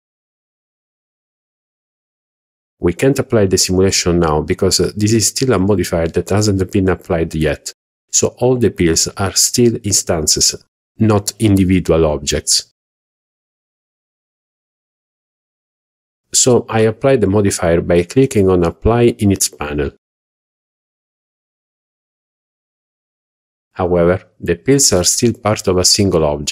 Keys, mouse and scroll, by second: 0.5-0.8 shift+middle drag, 1.2-1.7 scroll up 2, 2.1 shift+middle drag, 14.0-17.5 drag, 18.7 click, 19.4 click, 20.0 click, 20.6 click, 21.2 click, 23.6-24.1 scroll up 2.